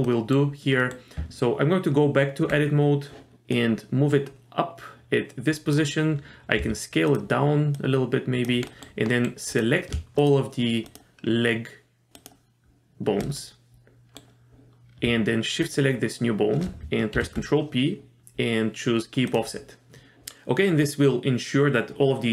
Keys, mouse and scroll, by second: 0.0 middle click, 0.8 middle click, 1.2 Tab, 3.5-5.7 drag, 6.6 s, 7.7 click, 8.7 middle click, 9.1 middle click, 9.5 click, 10.2 shift+click, 10.9 shift+click, 12.1 shift+click, 13.4 middle click, 15.6 shift+click, 17.1 ctrl+p.